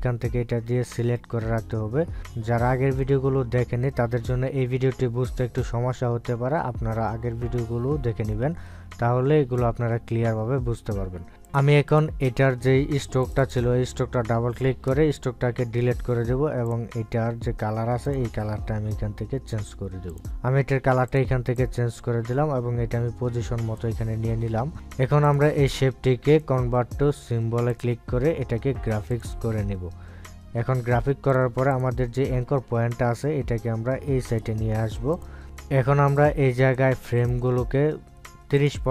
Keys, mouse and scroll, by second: 12.2 click, 17.5-25.4 drag, 27.1 right click, 28.5 click, 32.1 click, 37.0 click, 38.1 right click.